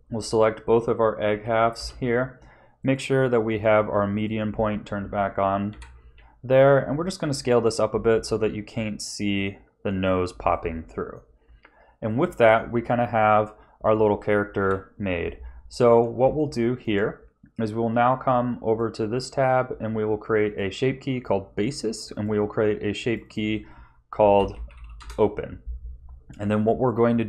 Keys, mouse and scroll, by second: 1.3 l, 1.7 l, 2.8 click, 5.7 KP_1, 6.6-7.1 scroll down 2, 7.1 shift+middle click, 8.2 s, 10.5 middle click, 11.5 scroll down 1, 12.0 middle click, 14.6 KP_1, 15.4 Tab, 16.3 shift+middle click, 18.6 click, 20.4 click, 22.1 click, 23.0 click, 23.2 click, 26.9 Tab.